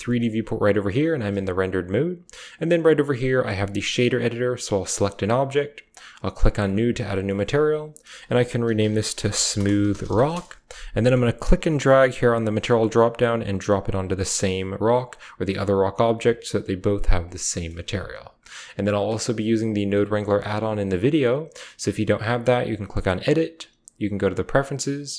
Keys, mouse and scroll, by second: 0.3 z, 2.3 click, 4.6 click, 4.8-6.3 typing, 5.8 click, 7.0 click, 7.9-10.2 drag, 9.1 o, 10.2 middle click, 13.8 drag, 13.8 typing, 14.9 drag, 16.1 drag, 16.3 typing, 17.7-18.5 typing, 17.8 click, 19.6 drag, 19.9-20.7 typing, 22.8-24.2 drag.